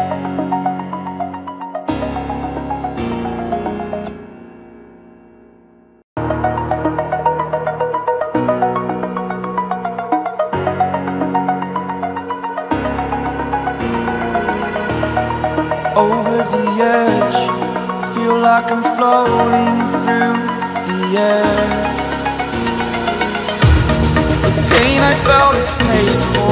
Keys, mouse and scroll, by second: 0.9 click, 15.6 alt+scroll up 1, 16.8 right click, 17.5 click, 18.5 scroll up 1, 19.0 alt+scroll down 1, 20.3 click, 21.3 click.